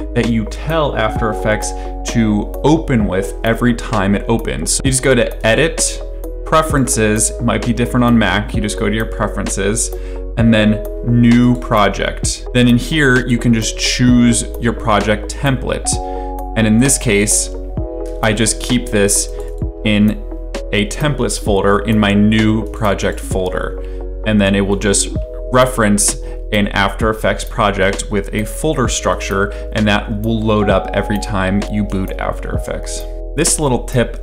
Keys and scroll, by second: 17.0 alt+Tab.